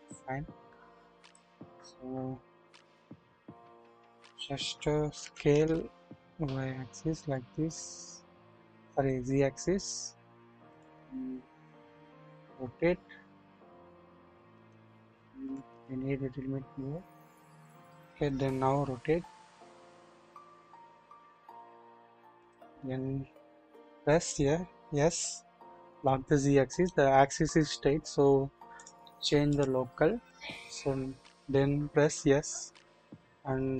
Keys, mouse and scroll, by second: 1.6-2.4 scroll up 1, 2.4-3.1 typing, 2.6-3.1 scroll down 1, 5.2 typing, 11.5-12.1 scroll up 2, 12.1 typing, 14.5 right click, 15.4 typing, 18.8 typing, 23.6 typing, 26.6 right click, 28.7-29.8 drag, 31.9 s.